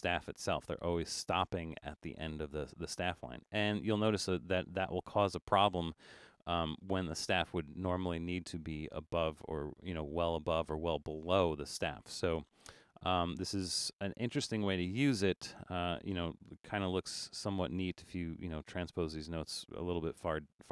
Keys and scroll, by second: 18.1 8.